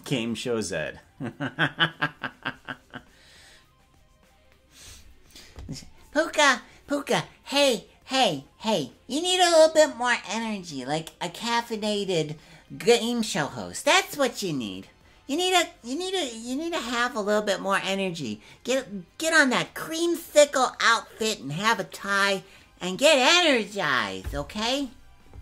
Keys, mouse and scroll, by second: 0.0-25.4 drag.